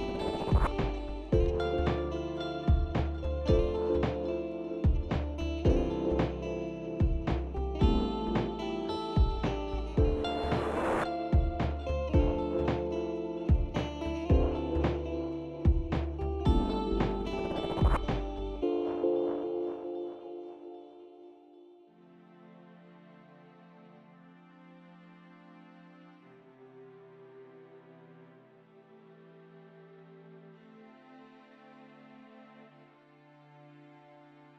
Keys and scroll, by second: 4.0 ctrl+space, 4.4-5.8 ctrl+space, 6.4 ctrl+space, 7.5 ctrl+shift+g, 9.2 ctrl+d, 17.1 typing, 17.3 Return, 30.7 ctrl+shift+g, 32.8 ctrl+d.